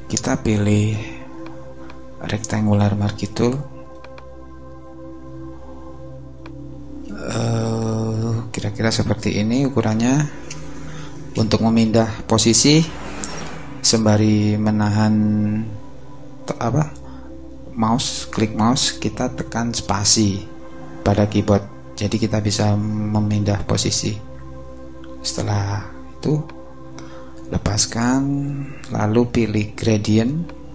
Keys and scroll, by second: 9.9 space, 11.3 space.